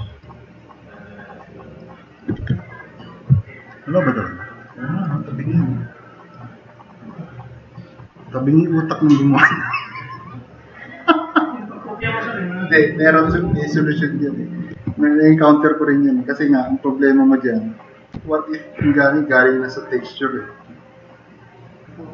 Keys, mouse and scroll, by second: 0.3 drag, 1.8 drag, 2.4 e, 4.2 click, 5.4-5.9 drag, 6.3-7.9 drag, 10.4-11.9 drag, 14.8 alt+q, 15.3 right drag, 15.4 drag, 15.6 middle click, 18.2 s, 19.1-21.2 drag, 22.0-22.1 drag.